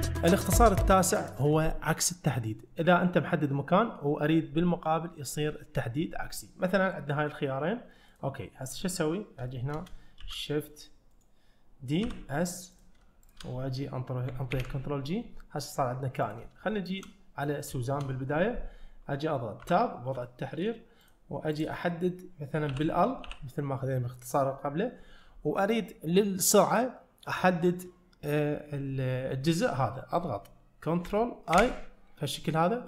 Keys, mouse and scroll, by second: 8.2 click, 8.8 click, 9.5 shift+middle click, 10.3 shift+d, 12.1 s, 13.3 shift+click, 14.6 ctrl+j, 16.3 click, 16.8 shift+middle click, 17.8 shift+middle click, 19.7 Tab, 20.3 shift+middle click, 21.0 click, 21.6 click, 22.8 l, 23.3 l, 31.6 ctrl+i.